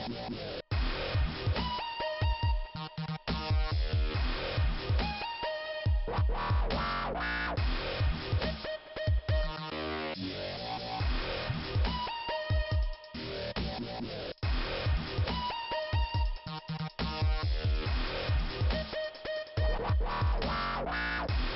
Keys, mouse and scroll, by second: 0.4 click, 1.4 click, 1.9 click, 2.2 click, 2.3 double click, 2.9 double click, 5.6 click, 8.2 click, 9.0 click, 9.2 click, 10.9 click, 13.0 click, 13.2 click, 19.3 click, 19.5 click, 21.2 click.